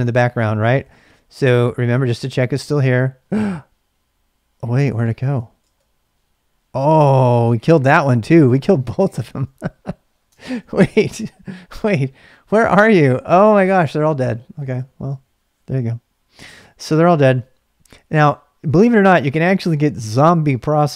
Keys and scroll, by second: 0.3-2.5 typing, 5.0-5.3 typing, 5.6 Return, 7.9-8.9 typing, 10.3 ctrl+[, 10.4 k, 10.6 k, 11.7 Return.